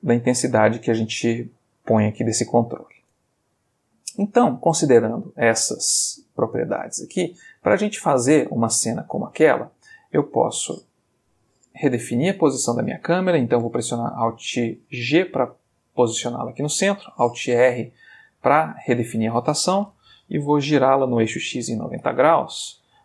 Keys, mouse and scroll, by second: 3.4 Escape, 4.1-7.0 drag, 7.2 x, 7.6 click, 8.4-9.9 middle drag, 10.2 click, 12.2-12.9 middle drag, 15.2 alt+g, 15.8-16.5 alt+middle drag, 17.5 alt+r, 18.0 alt+middle click, 18.8-19.3 middle drag, 20.8 r, 21.3 x, 21.4 9, 21.6 0, 21.9 Return.